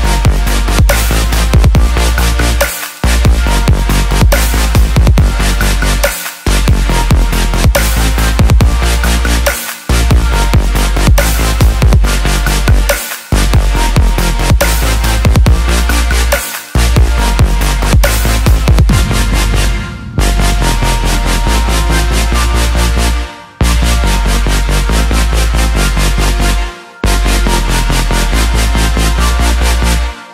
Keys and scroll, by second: 0.0-4.1 typing, 25.8 ctrl+j.